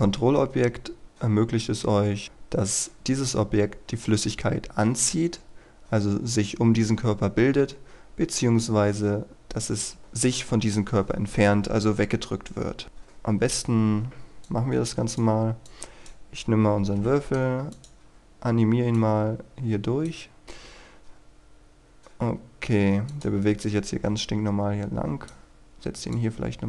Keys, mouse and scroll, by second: 14.4-15.5 drag, 16.9 i, 17.6-26.6 drag.